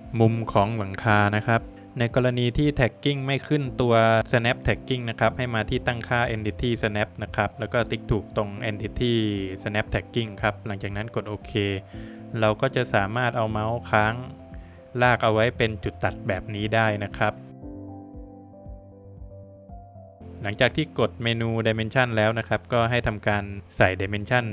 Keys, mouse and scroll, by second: 3.3 click, 8.6 click, 20.5 click, 23.1 scroll up 3, 23.5 Escape, 23.7 scroll down 2, 24.1 middle click.